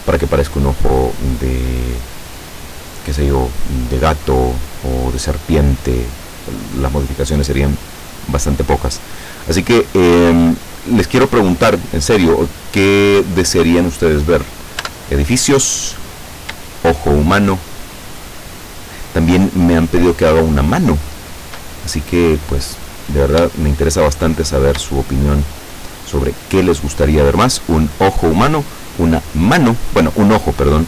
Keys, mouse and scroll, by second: 13.0-13.4 scroll down 2, 14.9 Tab, 17.3-18.3 shift+middle drag, 18.6-20.5 shift+middle drag, 20.8 shift+middle click, 22.7-23.0 scroll down 2, 23.6-25.8 shift+middle drag.